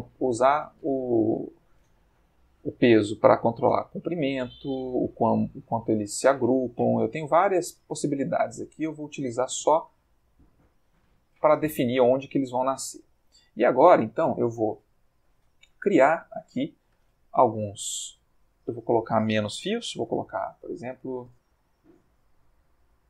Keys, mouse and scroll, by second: 10.4 middle click, 12.2-13.3 middle drag, 15.2-16.6 shift+middle drag, 16.8 ctrl+shift+middle click, 18.7 click, 20.1 5, 20.2 0, 22.3 0.